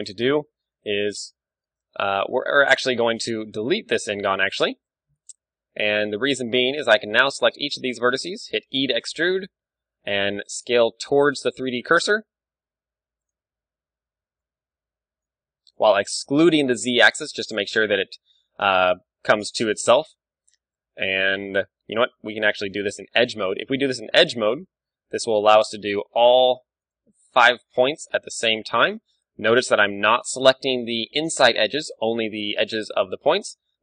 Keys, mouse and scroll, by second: 0.8 KP_7, 2.4 ctrl+Tab, 3.7-5.3 right drag, 4.1 x, 5.5 ctrl+Tab, 6.9-9.5 right drag, 8.8 e, 13.8-15.3 right drag, 14.4 ., 14.8 s, 19.6-21.5 right drag, 20.1 ctrl+z, 21.8 ctrl+Tab, 23.0-25.3 middle drag, 25.3-27.7 right drag, 27.7-29.4 middle drag, 29.4-31.4 right drag, 32.0 right click, 33.0-33.8 middle drag.